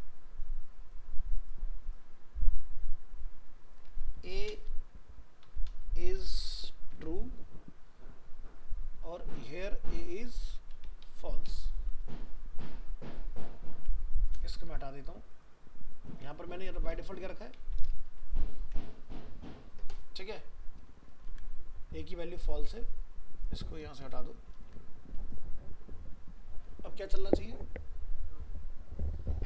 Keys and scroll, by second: 18.6 ctrl+s, 24.5 ctrl+s.